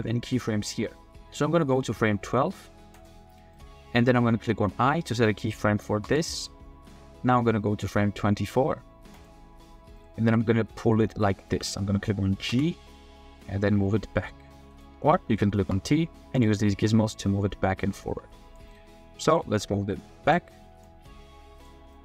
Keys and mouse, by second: 3.0 click, 3.6 middle drag, 3.7 click, 3.8 middle drag, 4.0-4.5 drag, 6.1 i, 9.1 middle click, 10.0-10.7 middle drag, 12.5 g, 14.7-15.6 drag, 15.6 t, 16.3 click, 17.2-18.6 drag, 20.3-22.0 drag.